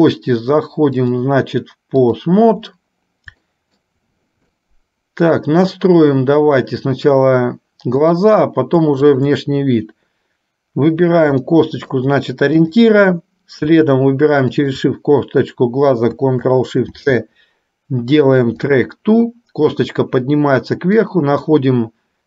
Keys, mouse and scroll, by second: 1.1-2.5 drag, 3.6 shift+middle click, 4.7 middle click, 8.1 click, 9.4 shift+click, 11.7 shift+middle click, 12.9 click, 14.5 shift+click, 18.9 ctrl+shift+c, 21.1 click.